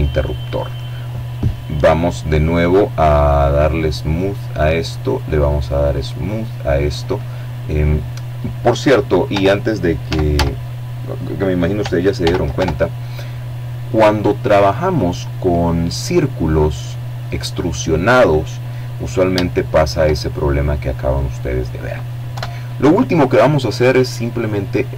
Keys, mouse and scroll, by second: 1.5 click, 3.0 right click, 4.2 click, 4.7-5.3 scroll down 1, 7.3 Tab, 8.0 a, 10.1 ctrl+n, 10.5 ctrl+Tab, 11.8 click, 11.9-14.6 middle drag, 14.7-16.2 middle drag, 17.0-17.4 scroll down 1, 17.4 shift+middle click, 19.0 middle click, 20.2 KP_7, 22.8-23.6 scroll up 2, 23.6 shift+middle click, 24.2 shift+middle click.